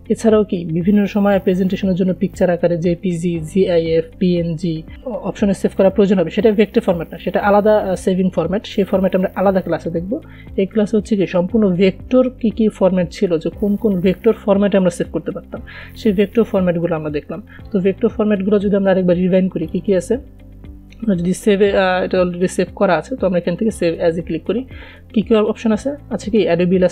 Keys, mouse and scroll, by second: 10.9 click, 20.0 click, 24.0 click.